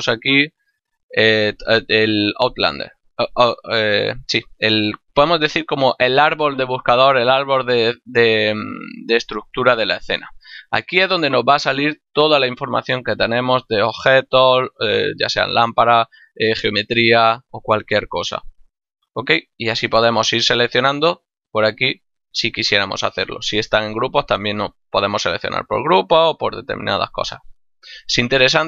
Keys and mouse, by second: 5.3 click, 7.7 click, 20.4 click, 24.7 click, 27.5 click.